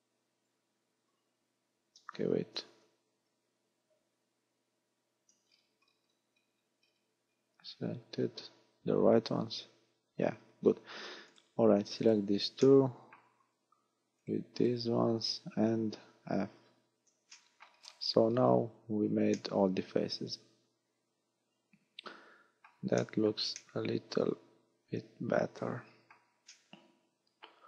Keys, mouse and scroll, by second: 2.7 ctrl+z, 3.2 ctrl+z, 4.4 ctrl+z, 5.5-7.6 scroll down 14, 7.6-8.1 scroll up 3, 8.1-8.6 scroll up 2, 8.9 scroll up 2, 9.5 f, 10.1-10.7 scroll up 3, 11.3 right click, 12.0 shift+right click, 12.7 shift+middle click, 14.2 shift+right click, 14.6 shift+right click, 15.1-16.2 scroll down 1, 16.2 scroll down 3, 16.3 f, 17.3 shift+middle click, 17.7-18.5 scroll down 10, 18.8 a, 19.4 middle click, 23.0 shift+middle click, 23.6 middle click, 26.5 middle click.